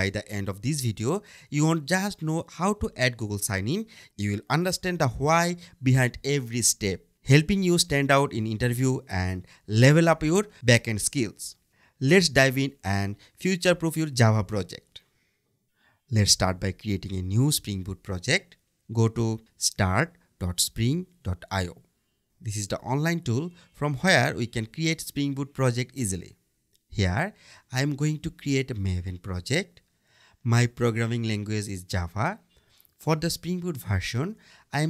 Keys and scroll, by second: 0.4 Return, 17.7 BackSpace, 22.1 Return.